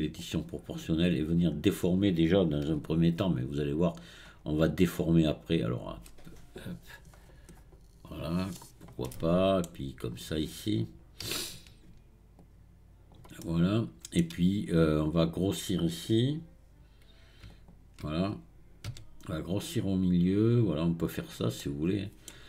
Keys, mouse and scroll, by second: 0.2-2.9 drag, 4.7-7.7 drag, 9.1-11.3 middle drag, 11.3 alt+click, 12.4-13.5 drag, 13.5-17.5 middle drag, 17.5 alt+click.